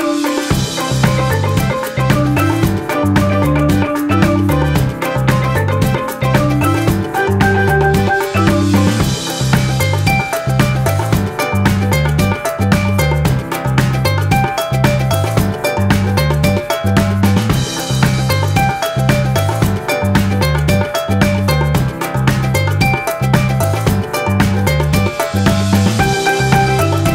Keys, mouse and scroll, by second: 4.9 alt+click.